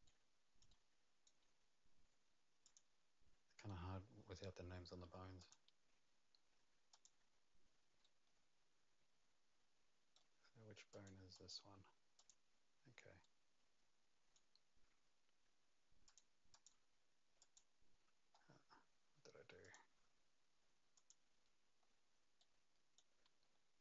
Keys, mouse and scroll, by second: 0.0 right click, 0.7 right click, 2.6 click, 3.9 scroll down 2, 5.4 click, 5.4-6.9 scroll down 1, 6.9 click, 8.0 right click, 10.9 click, 11.3 click, 12.1 click, 13.2 right click, 16.0 click, 16.5 click, 17.4 click, 18.3 scroll up 3, 19.6 click, 20.9 click, 21.8-22.3 scroll down 2.